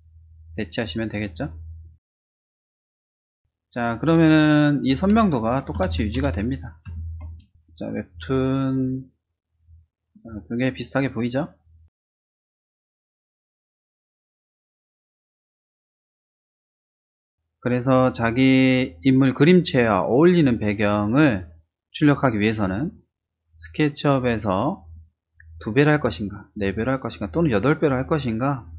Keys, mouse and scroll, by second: 1.4 Return, 2.9 ctrl+space, 3.0 click, 3.3-4.4 drag, 4.7 space, 4.8 click, 5.3 ctrl++, 6.1 ctrl+-, 6.5 space, 6.7 click, 8.0 click, 8.4 space, 8.6 click, 9.7 click, 13.1 click, 14.3 click.